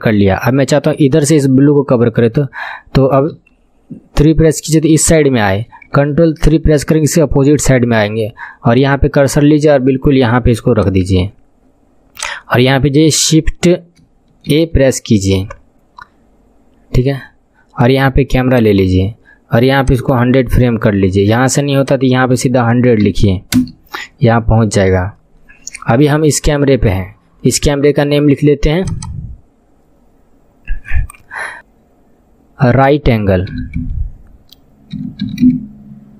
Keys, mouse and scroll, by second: 1.5-3.3 scroll up 3, 3.3 KP_3, 4.4 scroll up 6, 5.4-8.7 shift+middle drag, 6.5 ctrl+KP_3, 8.7-19.8 drag, 14.5 shift+a, 19.8-23.5 drag, 23.2 KP_0, 28.8-36.1 drag.